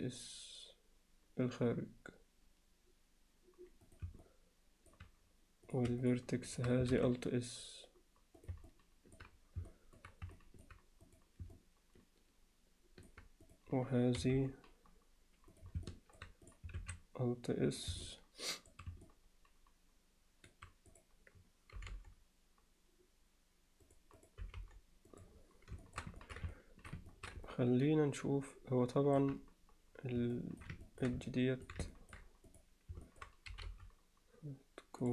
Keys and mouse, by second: 4.2 alt+middle click, 6.9 alt+s, 8.7 middle click, 9.7 alt+middle click, 10.4 middle click, 11.1 click, 11.5-13.1 alt+middle drag, 13.5 click, 14.2 g, 15.9 alt+middle click, 16.8 alt+s, 18.1 middle click, 19.1-20.5 middle drag, 20.9 click, 21.8 g, 24.4 g, 25.8 alt+shift+middle click, 26.2 ctrl+alt+middle click, 26.5 alt+middle click, 27.1 middle click, 27.5-29.2 alt+middle drag, 30.4 alt+middle click, 30.9 ctrl+middle click, 31.3 middle click, 31.9 ctrl+alt+middle click, 32.5 click, 33.1 middle click.